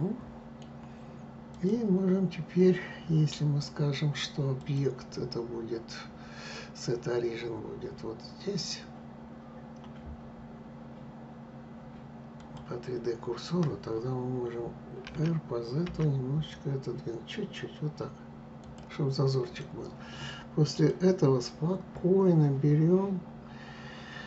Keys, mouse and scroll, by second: 1.2 click, 4.3-7.3 drag, 14.7 r, 19.1 click, 20.5 click.